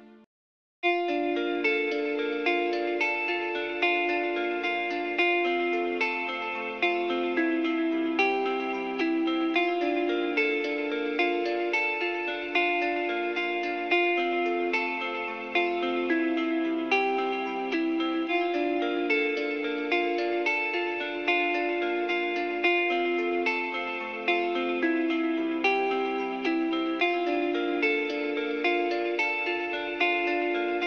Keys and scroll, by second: 0.2 s, 5.9 h.